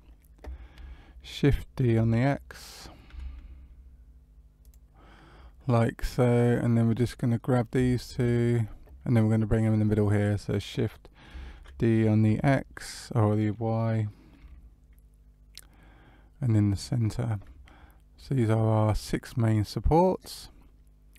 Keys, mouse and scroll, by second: 1.7 shift+d, 6.9 click, 7.9 shift+click, 11.5 shift+d, 17.6 middle click.